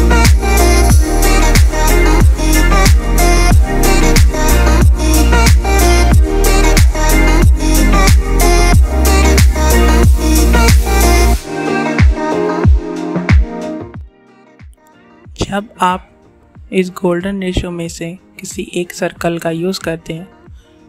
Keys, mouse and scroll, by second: 2.4-8.5 drag, 8.5 click, 10.5-15.5 drag, 16.8 click, 17.9-20.8 drag.